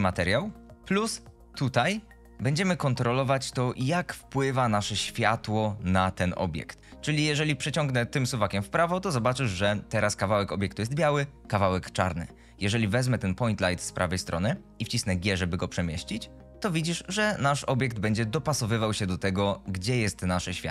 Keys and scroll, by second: 15.4 g.